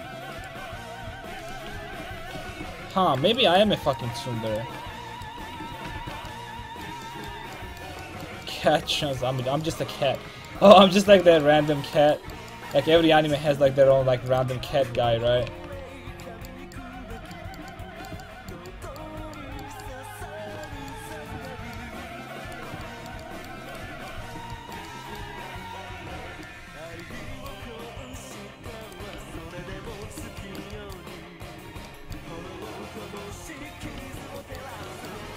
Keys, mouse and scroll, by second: 1.0 ctrl+z, 1.7 ctrl+x, 2.2 a, 2.5 ctrl+t, 2.7 a, 3.9-5.1 drag, 5.7 ctrl+x, 5.7 a, 6.0 ctrl+t, 6.1 a, 11.1 middle click, 12.9 c, 14.6 ctrl+x, 14.9 a, 15.3 ctrl+t, 15.5 a, 22.5-26.2 right drag, 28.8 right click, 29.2 ctrl+x, 29.4 a, 29.7 ctrl+t, 29.9 a, 31.4-33.2 right drag, 33.4 ctrl+x, 33.7 a, 34.0 ctrl+t, 34.2 a.